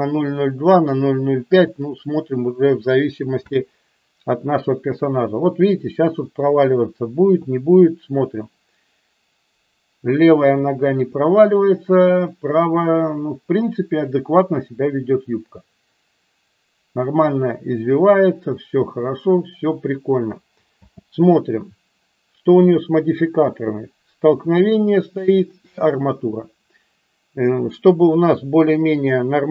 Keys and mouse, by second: 3.5 space, 21.0 space, 22.6 click.